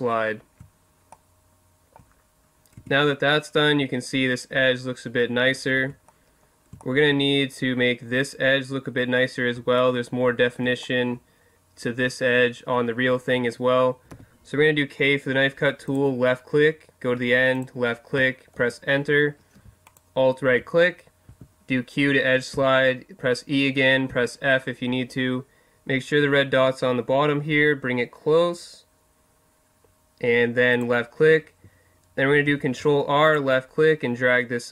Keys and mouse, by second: 1.1-2.8 middle drag, 2.8 Tab, 5.8 Tab, 6.1 middle drag, 6.9 middle click, 7.2-9.2 middle drag, 9.8-14.1 middle drag, 14.1 k, 19.9 right click, 21.3 q, 30.8-32.4 drag, 32.4 ctrl+r.